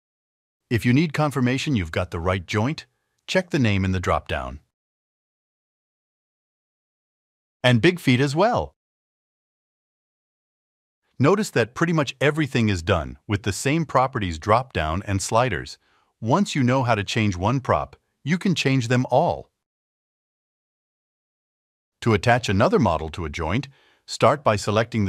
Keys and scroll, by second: 6.1 alt+1, 14.7 alt+1.